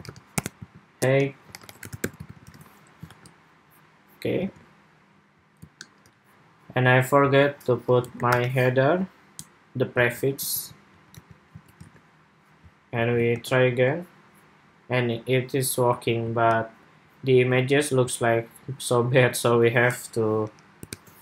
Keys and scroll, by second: 2.1 super+s, 2.3 super+Tab, 2.9 super+r, 4.2 super+Tab, 5.8 shift+super+2, 10.3 super+c, 11.0 super+v, 11.2 super+s, 11.6 super+Tab, 13.1 super+r, 16.1 super+Tab.